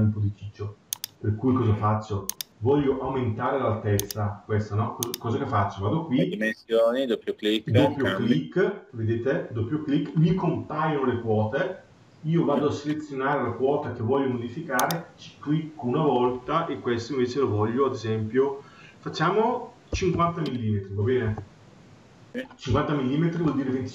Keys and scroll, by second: 2.7 Escape, 21.0 Return.